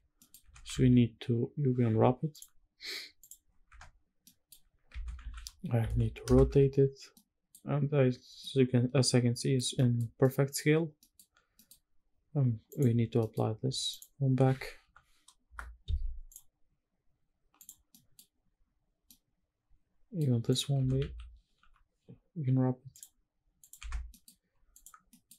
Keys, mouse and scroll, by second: 0.1 Tab, 0.5 a, 1.6 u, 3.4 Tab, 3.9 middle click, 4.5 Tab, 4.9 a, 5.0 r, 5.5 KP_9, 5.6 KP_0, 5.9 KP_Enter, 6.1 Tab, 6.8-7.2 middle drag, 7.5-8.0 scroll up 2, 8.0 scroll down 2, 8.2-9.2 middle drag, 9.5 shift+middle drag, 9.7 scroll up 1, 9.9-10.2 middle drag, 10.5 scroll down 1, 10.7 middle click, 11.1 scroll up 1, 11.2 middle click, 11.7-12.0 scroll down 1, 12.4 click, 12.9 middle click, 13.6 shift+click, 14.5 ctrl+l, 16.0 click, 16.2-16.6 scroll up 1, 16.6-17.3 scroll down 1, 17.3 click, 17.6 middle click, 18.0-18.3 scroll up 2, 18.3-18.7 scroll down 1, 18.7-19.9 middle drag, 20.2 click, 20.4 Tab, 20.7 a, 21.3 u, 23.6 Tab, 23.8 middle click, 24.4 click, 24.7 scroll down 1, 24.8 middle click, 25.1-25.3 scroll up 1.